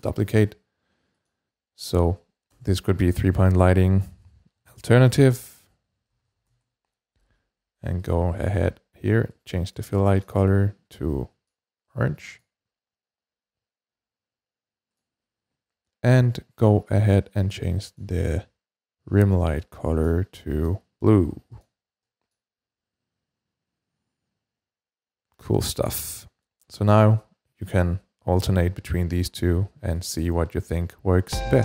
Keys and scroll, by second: 2.3 BackSpace, 4.2-7.0 typing, 8.3 typing.